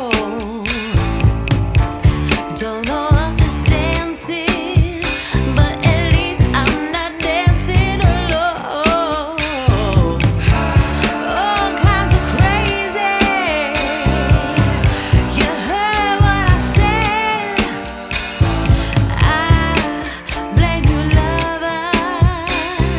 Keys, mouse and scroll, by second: 2.4 click, 4.4 click, 7.2 click, 10.2 ctrl+shift+click, 12.0-12.4 scroll up 2, 12.4-12.8 scroll down 1, 12.8-13.2 scroll up 1, 13.2-14.0 scroll down 1, 14.0-15.3 scroll down 1, 16.5 click, 18.0 F10, 20.1 scroll up 1, 20.2 scroll down 1, 20.4-21.0 scroll up 3, 22.5 click.